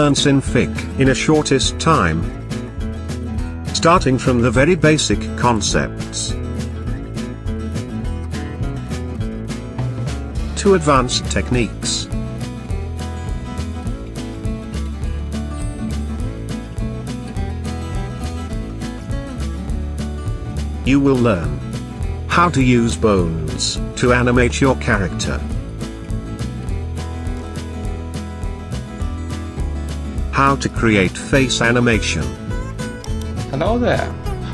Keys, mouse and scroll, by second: 27.2 click, 32.6 click.